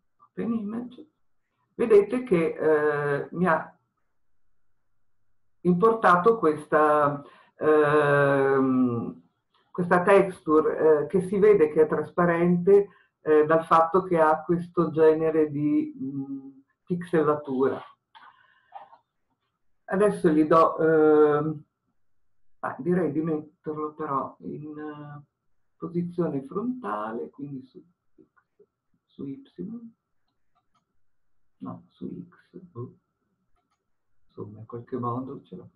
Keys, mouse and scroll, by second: 0.0-1.3 drag, 1.3-2.9 scroll down 1, 30.8 click, 33.7-34.7 drag.